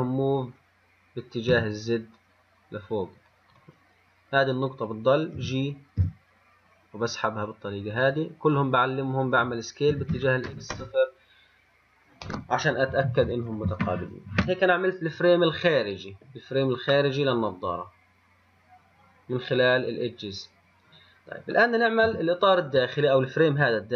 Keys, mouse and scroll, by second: 0.0 g, 3.8 click, 4.6 click, 5.6 f, 6.2 g, 8.8-10.1 drag, 10.1 s, 15.3-17.2 scroll down 3, 17.2-20.3 middle drag, 22.3 KP_1, 23.0 scroll up 2.